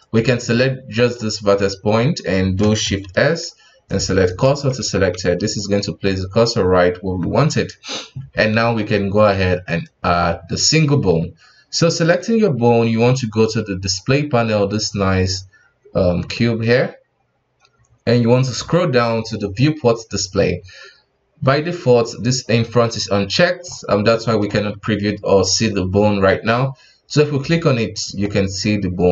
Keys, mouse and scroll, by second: 0.0 right click, 0.5-3.0 middle drag, 3.0 shift+s, 4.7 Tab, 5.1 KP_1, 5.8-6.1 middle drag, 6.1-6.9 scroll up 2, 6.9 KP_1, 7.2-8.4 scroll down 3, 8.4 scroll down 2, 8.5 shift+a, 23.1-23.6 middle drag, 23.6-24.1 scroll up 4, 24.1-24.5 middle drag, 24.5 KP_1, 26.3-27.6 scroll down 1, 27.6 click, 28.2-29.1 middle drag.